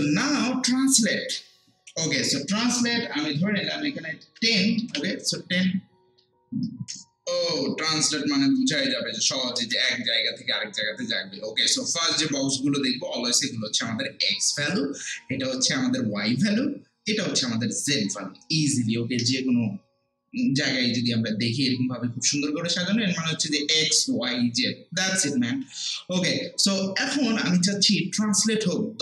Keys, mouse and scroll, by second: 1.1-4.8 drag, 4.5-5.3 typing.